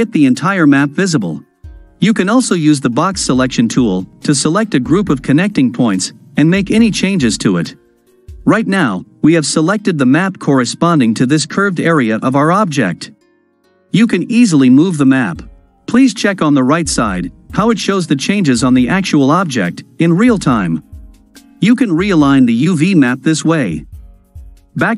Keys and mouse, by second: 3.0-5.9 drag, 8.7-9.9 middle drag, 14.4 g.